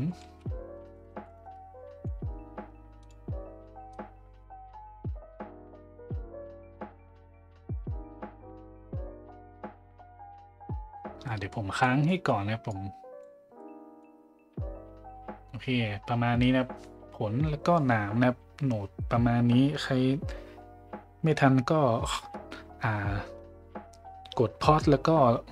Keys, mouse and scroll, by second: 3.9 click, 4.8 middle click, 4.9 click, 5.8 click, 6.4 click, 6.8 drag, 7.3 click, 7.6 click, 8.1-9.6 drag, 9.8 click, 11.2 middle click, 11.8 middle click, 12.7 click, 13.6 middle click.